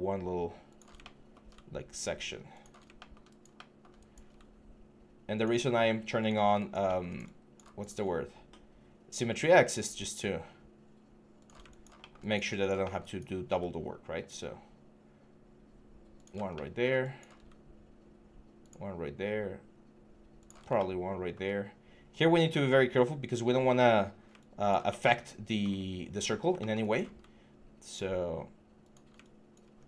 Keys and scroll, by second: 29.5 3.